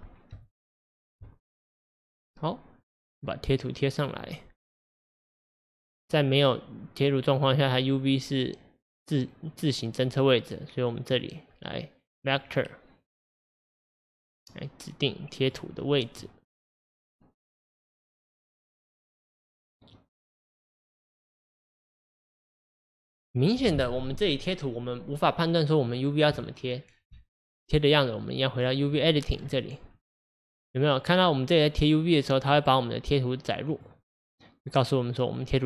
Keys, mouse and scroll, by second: 4.1-5.9 drag, 5.9-8.9 middle drag, 12.4 click, 14.3-16.2 drag, 16.2-20.6 middle drag, 20.6-27.6 drag, 27.8-32.8 drag.